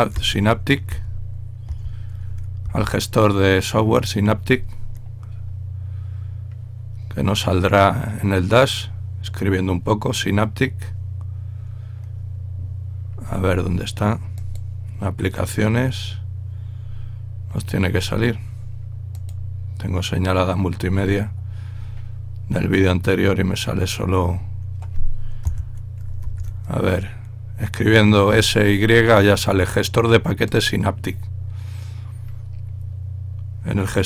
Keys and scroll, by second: 0.0-2.6 typing, 26.0-26.7 typing.